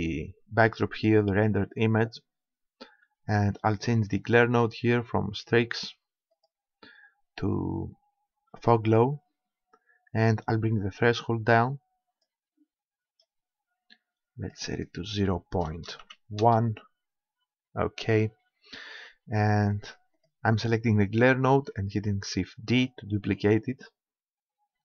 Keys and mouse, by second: 4.1-6.4 middle drag, 6.4-8.4 drag, 10.2-12.1 drag, 14.4-16.2 middle drag, 20.2-21.9 middle drag, 22.7 shift+d.